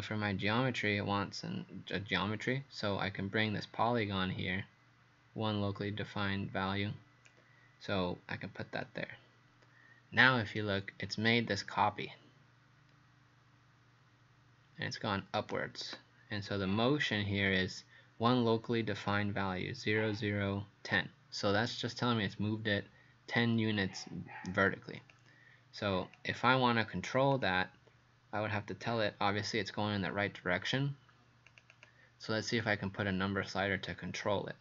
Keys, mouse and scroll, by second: 7.3 click, 10.6 right click, 25.1 click, 31.7 click.